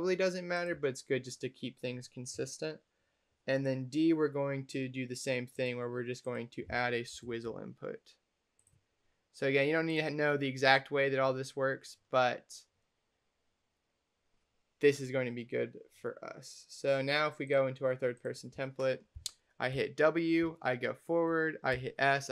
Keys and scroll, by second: 7.1 s, 19.6 w, 21.6 s.